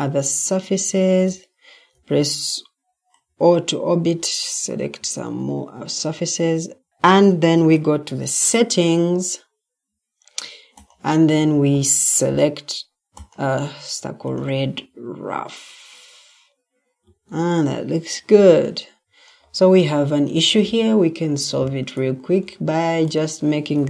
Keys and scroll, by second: 4.9 Escape, 7.5 ctrl+t, 16.9 Escape.